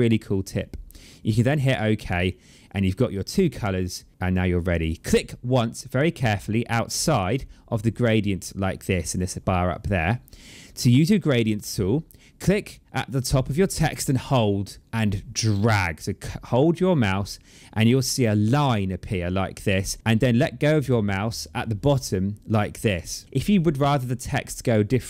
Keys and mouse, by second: 1.1 click, 7.7 click, 15.2 click.